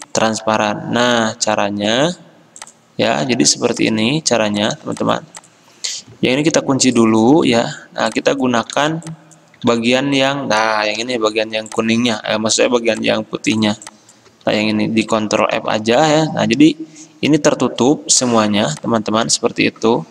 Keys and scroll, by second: 3.5 ctrl+z, 6.7 ctrl+2, 7.6 ctrl+z, 8.9 ctrl+z, 9.8 ctrl+z, 11.1 ctrl+c, 12.7 ctrl+alt+2, 14.6 ctrl+z, 15.7 ctrl+f, 19.5 ctrl+z.